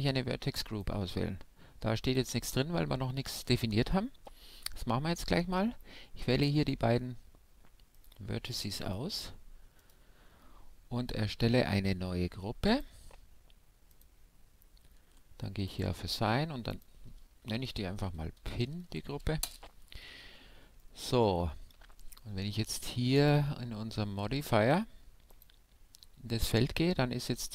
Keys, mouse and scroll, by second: 0.6-3.9 drag, 3.9-6.1 middle drag, 4.6 Tab, 6.1-7.9 right drag, 7.9-9.8 drag, 8.8-12.0 right drag, 12.7-15.6 drag, 15.7-18.4 drag, 20.8-23.1 middle drag, 21.7 Tab, 23.1-24.9 drag, 25.3-27.5 drag.